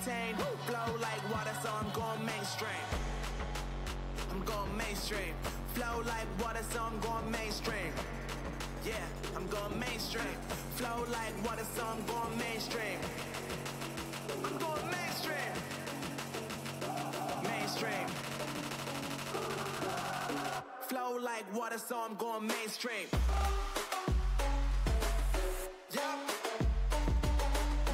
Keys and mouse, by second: 0.2 Tab, 1.4 KP_1, 1.8 z, 6.3 Tab, 6.5 z, 9.7-11.3 typing, 10.5 Tab, 15.0 z, 15.9 ctrl+e, 18.8 z, 22.2 ctrl+e, 23.8 z, 24.6 z, 25.2 a, 25.5 a, 27.1 z.